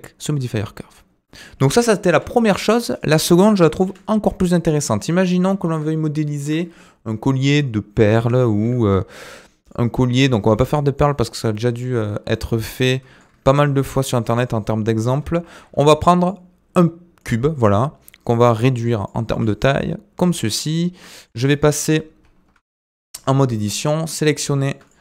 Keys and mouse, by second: 0.4 Tab, 2.1 Delete, 3.9 Delete, 5.0-5.4 middle drag, 5.9-6.5 shift+middle drag, 8.5 shift+a, 10.7 shift+middle click, 12.5-13.2 middle drag, 15.4 shift+a, 17.6 s, 19.3 s, 21.1 middle click, 21.7 middle drag, 22.5 KP_Decimal, 22.8 Tab, 23.8 click, 24.1 click, 24.3 middle click.